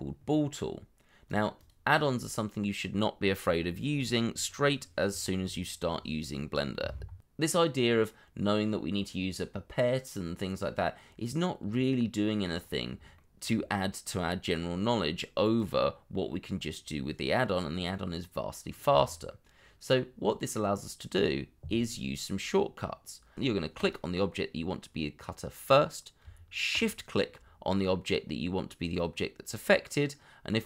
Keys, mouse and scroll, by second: 1.5 double click, 7.9 scroll down 1, 8.4 shift+middle click, 11.7 shift+middle click, 12.5-12.9 scroll up 1, 13.1 shift+middle click, 26.7 shift+click, 30.5-30.6 scroll down 1.